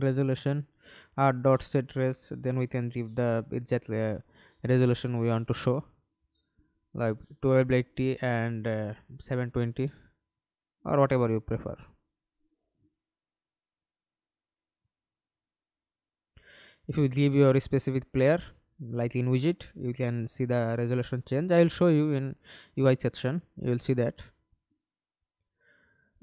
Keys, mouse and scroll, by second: 0.0-1.7 typing, 4.0-5.2 typing, 6.5 7, 6.8 0, 9.9-10.4 typing, 10.8 Return, 17.3 alt+click, 21.5 Delete, 23.0 double click, 24.7 right click.